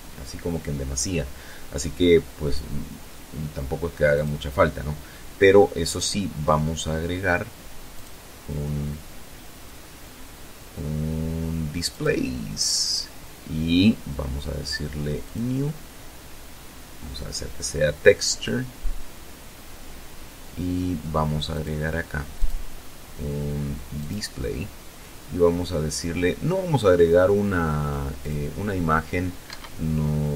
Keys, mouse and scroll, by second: 3.1 click, 6.8 click, 10.8 click, 12.6-13.0 scroll down 2, 14.1 click, 15.1-15.6 scroll down 2, 20.4 click, 21.2 click, 22.9 click, 27.1 click, 28.3 Escape, 29.3 scroll down 2.